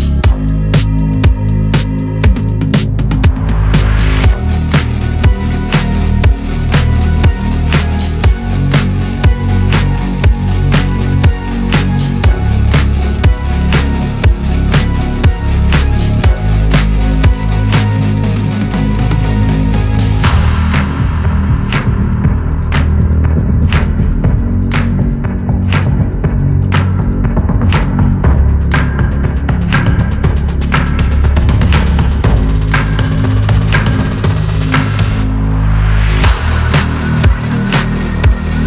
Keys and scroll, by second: 6.9 Delete.